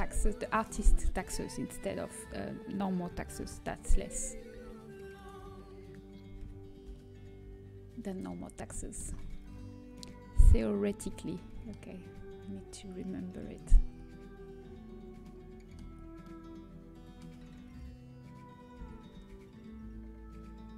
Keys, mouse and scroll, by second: 3.3 shift+d, 6.8 g, 8.7-10.6 middle drag, 12.2 z, 13.3 KP_3, 14.8 z, 15.9 z, 18.9 g.